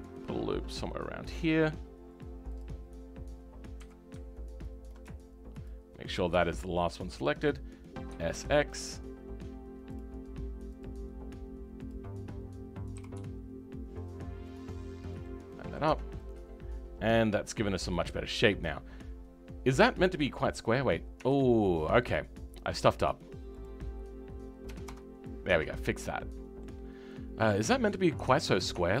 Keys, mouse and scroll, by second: 3.7 w, 4.8 ctrl+click, 6.0-6.4 scroll up 6, 6.4-8.1 right drag, 6.4 shift+middle click, 8.1 s, 10.7-13.0 drag, 13.0 g, 14.7-15.2 scroll down 5, 15.2 middle click, 15.8 Tab, 16.1-20.8 middle drag, 20.8-21.1 scroll up 3, 21.1 Tab, 25.8 middle click, 26.8 scroll down 4, 27.0-29.0 middle drag.